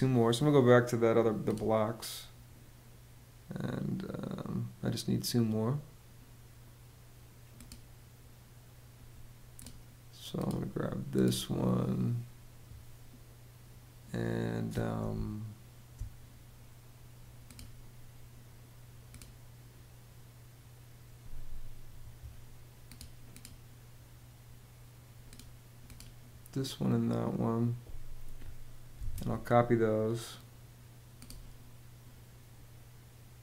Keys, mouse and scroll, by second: 14.7 space, 21.6 Escape, 28.6 super+c.